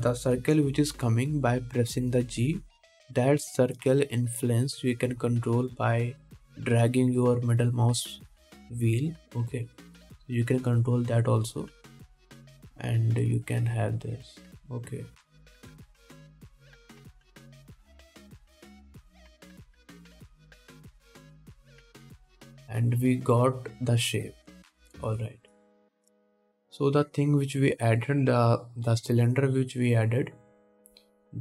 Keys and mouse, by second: 1.6 g, 22.2 ctrl+Tab, 25.9 middle click, 25.9 right click, 26.3 ctrl+s, 26.6 middle click, 26.7-28.8 drag, 28.8 middle click, 28.9-29.9 drag, 29.9 middle click, 29.9-31.2 drag, 31.2 middle click.